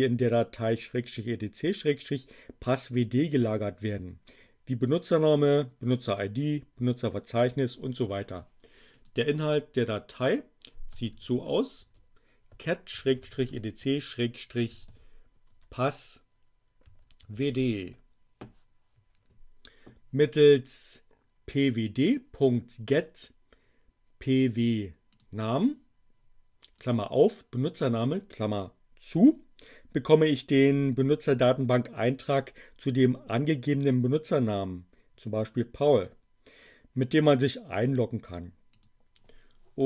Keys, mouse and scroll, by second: 8.8 click, 10.6-15.4 typing, 16.6-17.9 typing, 21.4 click, 25.0 click, 25.6-27.0 drag, 38.6 click.